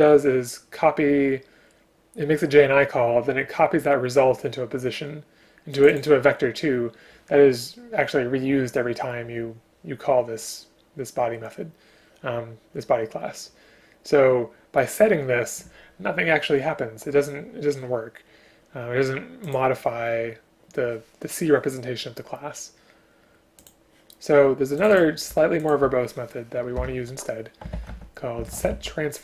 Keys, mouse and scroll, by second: 25.7 click, 26.8 BackSpace.